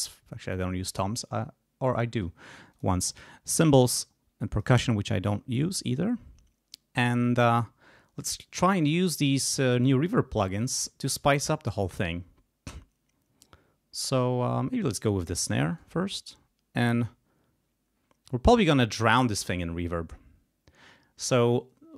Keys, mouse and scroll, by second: 2.7 click, 3.4 click, 4.5 click, 14.9 click, 15.7 right click, 17.0 click.